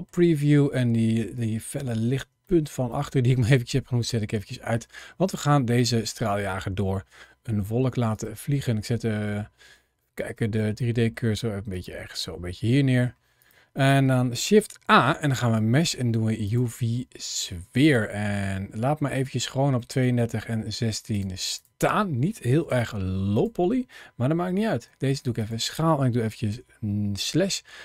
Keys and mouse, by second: 2.4 shift+middle click, 2.8-4.6 middle drag, 5.8-7.3 middle drag, 8.0 shift+click, 8.4-9.7 middle drag, 10.1 shift+click, 10.5-11.0 middle drag, 11.6 shift+click, 12.0-12.9 middle drag, 13.7 middle click, 14.3 shift+a, 17.7 click, 22.6 shift+click, 24.7 s, 25.3 click, 26.4 KP_Divide.